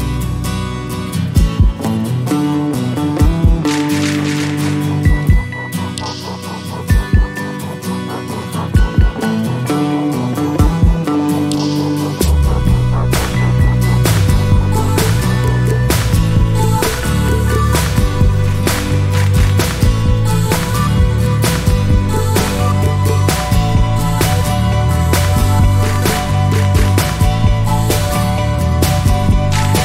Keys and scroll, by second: 1.0 1, 10.7 0, 11.8 1.